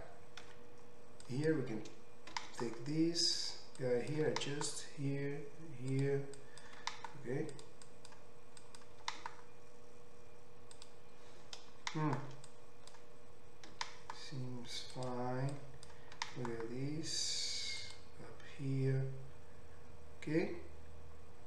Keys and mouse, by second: 0.8 1, 1.4-3.6 drag, 2.3 g, 3.6 middle click, 3.9-6.1 drag, 4.3 g, 6.1 middle click, 6.5-7.6 drag, 6.8 g, 7.6 middle click, 7.8-10.9 drag, 9.1 g, 10.9-12.6 middle drag, 12.6-15.1 drag, 13.8 g, 15.1 middle click, 15.6-17.9 drag, 16.2 g, 17.9-21.4 middle drag.